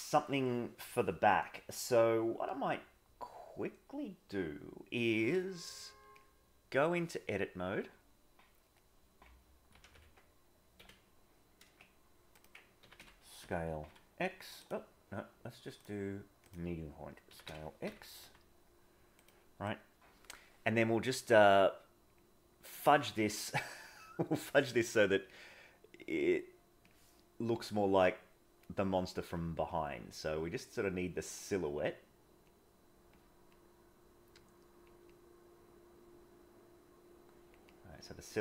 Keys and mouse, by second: 6.1 click, 9.7 ctrl+c, 9.9 ctrl+v, 10.7 g, 12.8 s, 15.8 click, 21.4 click, 23.5 middle click, 26.2 click, 27.5-28.6 drag, 28.8 click, 29.1 click, 29.7-31.1 drag, 31.4 click, 32.5 click, 33.5-34.8 drag, 35.0-37.5 drag, 37.6-38.4 drag.